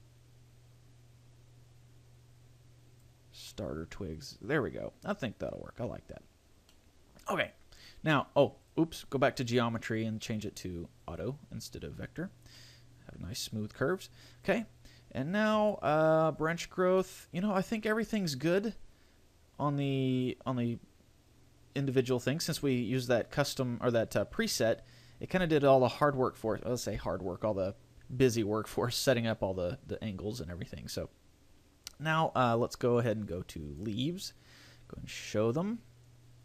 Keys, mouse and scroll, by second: 3.7 middle click, 6.9 middle click, 8.8 click, 10.7 click, 12.7 middle click, 14.5 click, 17.2 middle click, 24.2 scroll down 3, 24.7-25.7 scroll up 6, 33.0 click.